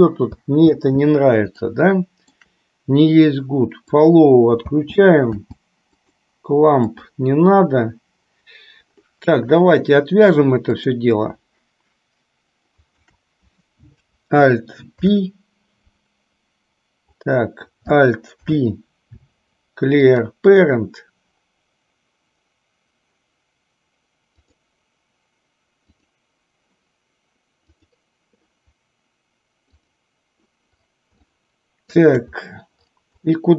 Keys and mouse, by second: 0.6 space, 1.8-2.6 shift+middle drag, 4.8 space, 5.5 space, 10.8 click, 13.1 shift+click, 15.1 ctrl+p, 18.4 alt+p, 24.4 click, 25.9 click, 27.8 click, 29.9 click, 31.5-32.1 shift+middle drag.